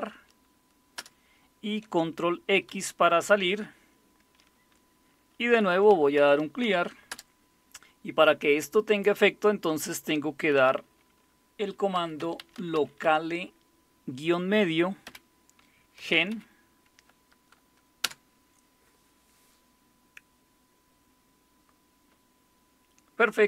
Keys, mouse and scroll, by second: 1.0 Return, 2.7 ctrl+x, 5.5-7.1 typing, 11.7-13.5 typing, 15.0-16.8 typing, 18.0 Return.